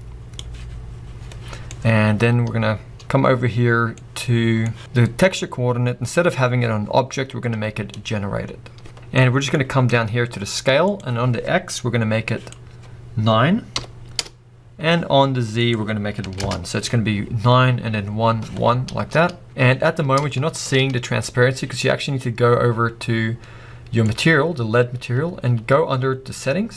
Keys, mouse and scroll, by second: 3.6-8.0 drag, 14.2 click, 14.3 Return, 16.8 click, 18.5-19.3 drag, 18.7-19.3 scroll down 2, 19.3 scroll up 2, 19.4 click, 19.5 scroll down 1, 19.6-20.2 scroll up 2, 20.4-20.8 shift+middle drag, 20.8 scroll up 2.